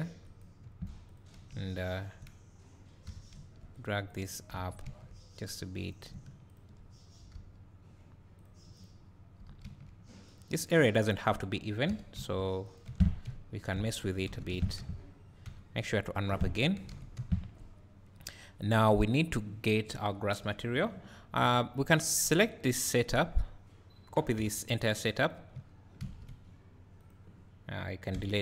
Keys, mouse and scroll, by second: 0.0 click, 0.4 right click, 0.7 1, 1.2 click, 1.8 shift+click, 3.1 g, 3.9 click, 4.7 g, 5.5 click, 6.6 shift+click, 7.4 g, 8.5 click, 9.4 g, 10.4 click, 12.0 g, 12.9 Tab, 13.5 `, 14.0 scroll down 1, 14.5 Tab, 14.8 a, 16.3 Tab, 16.6-17.0 scroll down 2, 22.3-22.9 drag, 27.0 click.